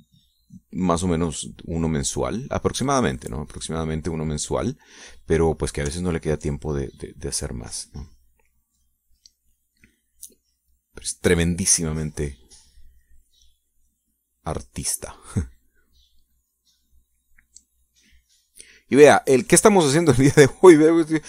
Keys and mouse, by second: 4.9 middle click, 5.6 middle click, 5.8 click, 7.0 ctrl+click, 7.6-16.2 ctrl+drag, 16.6-19.7 drag, 19.8 click, 20.4-21.2 drag.